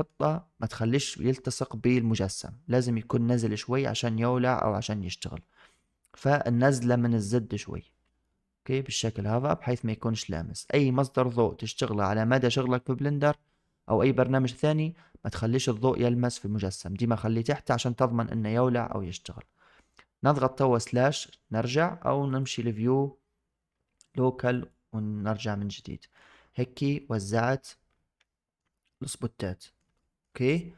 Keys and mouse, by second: 3.2 click, 4.0 click, 8.1-10.5 middle drag, 18.8-19.1 middle drag, 22.2-24.6 drag, 25.7-26.1 middle drag, 26.7-27.0 middle drag, 28.1-28.5 shift+drag, 28.6-29.7 middle drag, 29.8 shift+drag.